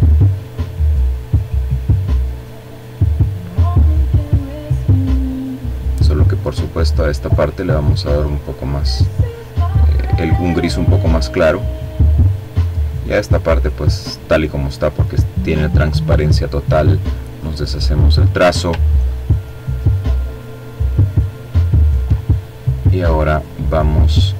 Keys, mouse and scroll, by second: 5.3 click, 6.6 click, 10.7 click, 14.4 click, 15.8 click, 17.4-17.8 ctrl+scroll up 2, 17.8-18.6 ctrl+scroll down 2, 18.9-19.4 ctrl+scroll up 2, 19.5-20.8 ctrl+drag, 21.3 click, 22.4 click.